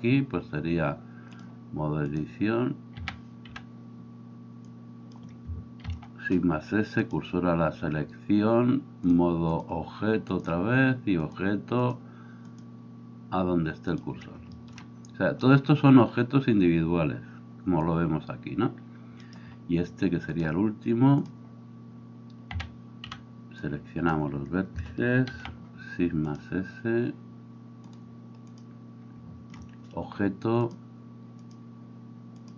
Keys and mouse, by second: 3.0 a, 3.6 b, 5.9 shift+s, 22.6 a, 23.1 b, 25.3 shift+s.